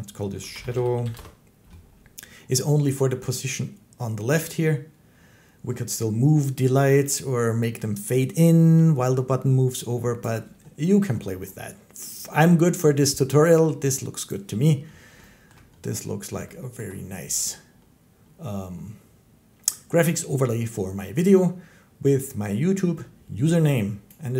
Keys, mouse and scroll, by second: 0.2-1.0 typing, 5.9 typing, 10.0 click, 14.1 click, 15.4 shift+middle click, 16.7 shift+middle click.